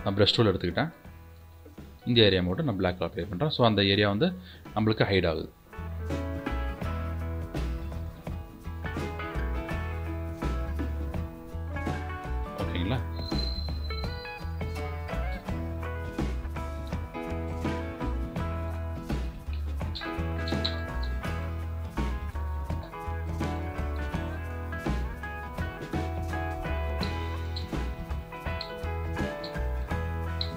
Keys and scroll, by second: 1.1 b.